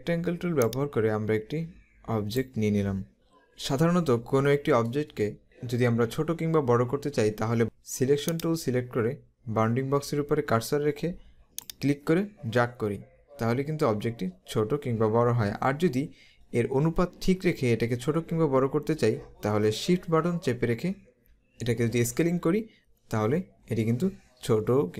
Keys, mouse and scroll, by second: 8.3 click, 11.7 click.